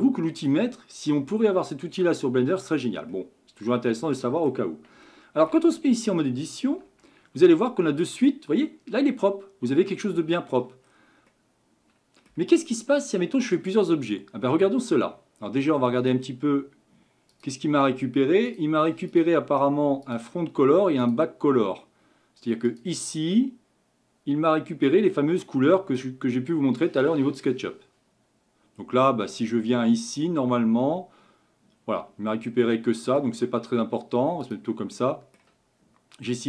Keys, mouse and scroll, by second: 0.6-3.1 scroll up 1, 3.1-5.0 middle drag, 5.0 scroll up 1, 5.1-5.9 shift+middle drag, 5.9-6.7 scroll up 2, 6.7 Tab, 7.4-10.1 middle drag, 10.9-11.3 scroll down 4, 11.3-26.3 middle drag, 26.3-29.0 drag, 30.2 click, 30.8-33.8 middle drag, 34.5 click, 35.0-36.4 middle drag.